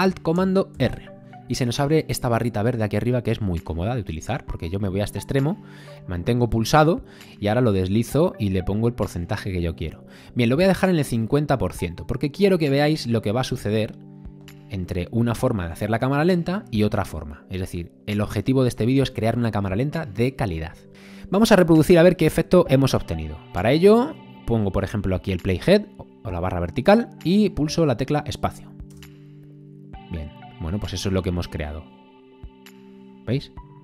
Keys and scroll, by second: 28.9 space.